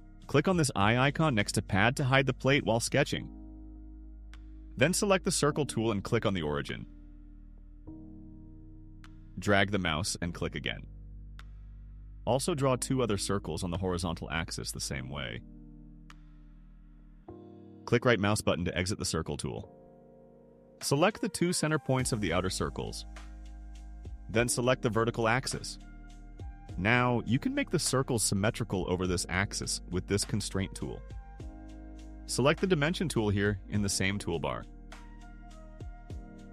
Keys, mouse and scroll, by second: 4.2 click, 7.9 click, 9.4 click, 11.0 click, 12.2 click, 14.2 click, 15.6 click, 16.7 click, 18.5 right click, 21.9 click, 23.3 click, 25.4 click, 30.7 click, 36.4 click.